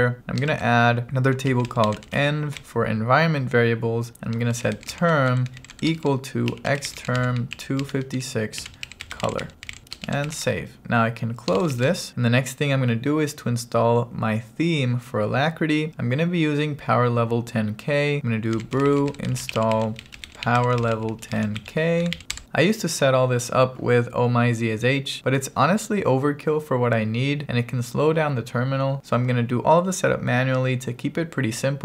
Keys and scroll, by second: 1.1-3.1 typing, 4.5-12.3 typing, 13.5 BackSpace, 18.3-22.2 typing.